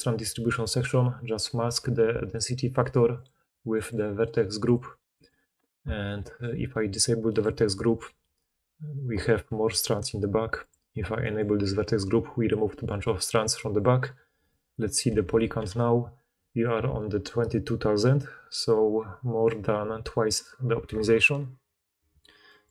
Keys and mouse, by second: 5.8-7.8 middle drag, 7.8-10.6 drag, 10.6-14.4 middle drag, 14.4-20.9 drag, 15.3 shift+h, 15.4 shift+h, 21.4 alt+h.